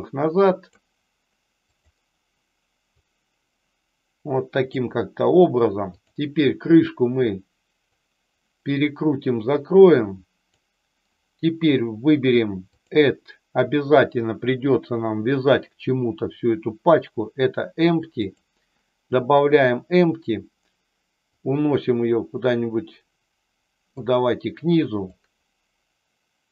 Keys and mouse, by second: 1.6 click, 2.9-4.7 drag, 5.8 click, 7.8-10.5 drag, 12.7-18.3 drag, 21.5-23.9 drag, 25.0-26.5 drag.